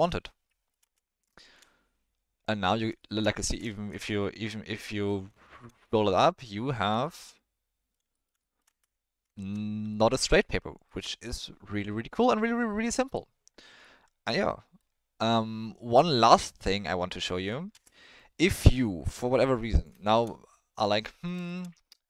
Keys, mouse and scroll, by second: 0.0 click, 0.4-0.7 middle drag, 0.8 space, 1.3 shift+middle drag, 3.0 shift+middle drag, 3.4 space, 3.7 shift+middle drag, 4.1-4.8 middle drag, 5.4 shift+middle drag, 5.9-6.4 ctrl+middle drag, 7.2-7.9 middle drag, 8.1 ctrl+middle drag, 8.4 middle drag, 8.7 space, 9.3 shift+middle drag, 9.9-10.2 ctrl+middle drag, 10.4-10.9 middle drag, 13.8-14.8 middle drag, 17.7 space, 18.1-19.8 drag, 20.1 shift+middle drag, 21.0 middle drag, 21.4 shift+middle drag.